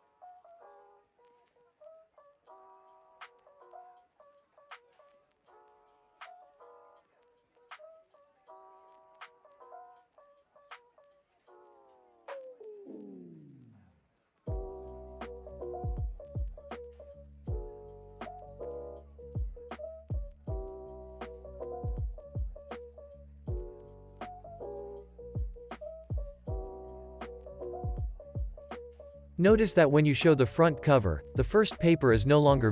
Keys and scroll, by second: 0.9 space, 4.6 space, 13.7 space, 17.5 space, 25.4 space, 29.3 super+s.